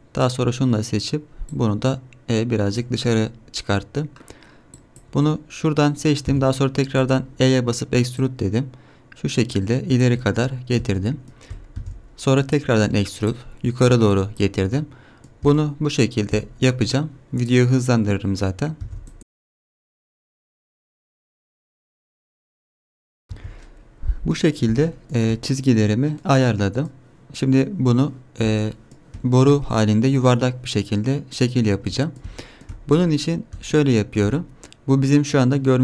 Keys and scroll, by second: 6.3 e, 11.8 e, 12.4 e, 18.8-22.9 typing, 23.3 Tab.